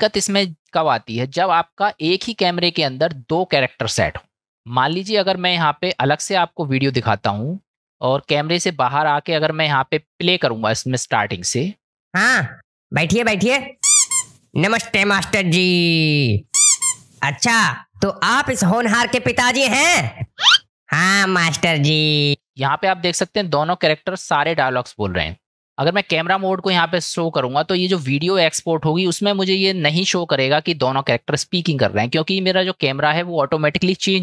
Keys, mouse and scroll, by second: 4.9-5.4 middle drag, 7.2-7.7 shift+middle drag, 7.8-10.1 middle drag, 11.1-12.0 drag, 12.0 space, 22.3 space, 26.7 KP_0.